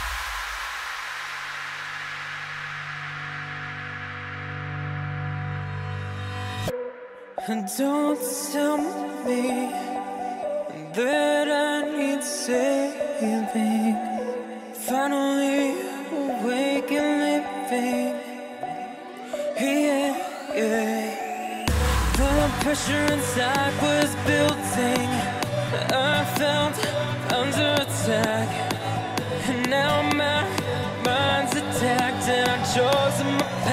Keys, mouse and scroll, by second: 1.2 KP_1, 2.6 s, 5.6-7.7 drag, 7.7 g, 10.5 KP_7, 12.2 z, 13.0 scroll up 1, 13.9-15.0 shift+middle drag, 15.0 click, 16.4-17.9 middle drag, 17.9 click, 26.0 shift+d, 29.0 click, 30.1 KP_1, 32.0 click.